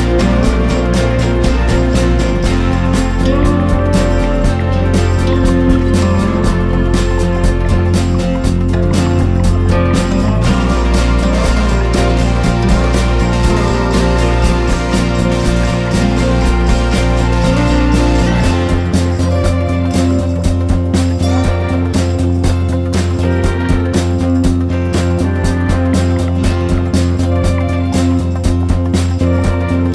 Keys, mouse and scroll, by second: 0.4 click, 6.2 scroll down 1, 7.3 ctrl+scroll up 1, 7.8 scroll down 1, 8.9-22.9 drag, 24.4 ctrl+scroll down 1, 27.6 click.